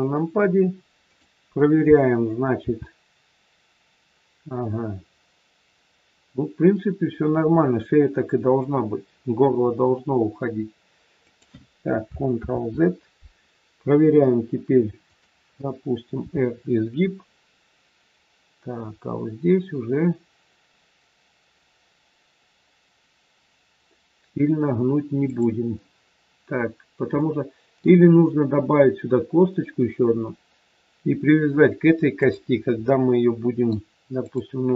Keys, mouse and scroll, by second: 1.0 click, 2.5 r, 12.4 ctrl+z, 15.0 click, 16.2 r, 27.1 middle click, 32.1 click, 32.7 middle click, 34.1 click.